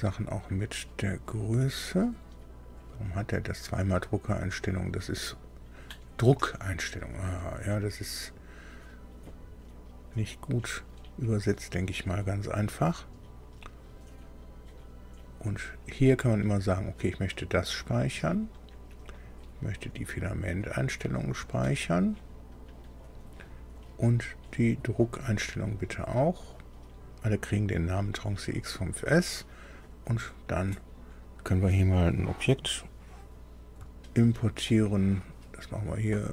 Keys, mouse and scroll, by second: 1.9 click, 8.2 click, 16.2 click, 17.9 click, 19.1 click, 21.2 click, 23.0 click, 24.5 click, 26.2 click, 27.8 click, 29.7 click, 36.0 click.